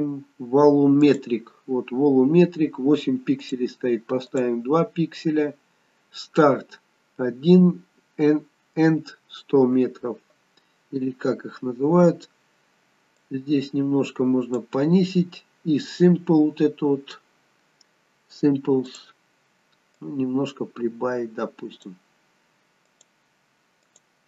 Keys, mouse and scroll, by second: 1.2 click, 3.5 click, 13.4 click, 20.1 click, 23.1 click.